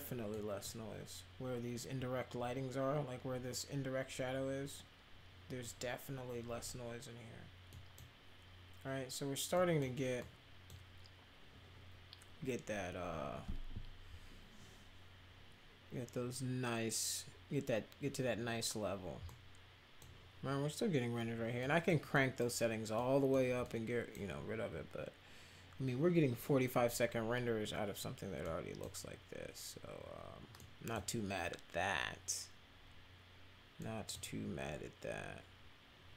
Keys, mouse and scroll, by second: 0.3 middle drag, 7.7 middle drag, 9.5 middle click, 10.1-10.6 middle drag, 19.2 middle click, 21.6 middle drag, 22.1 middle drag, 22.9 middle click, 23.6-24.1 middle drag, 28.4 middle click, 30.5 middle click, 33.8 middle click.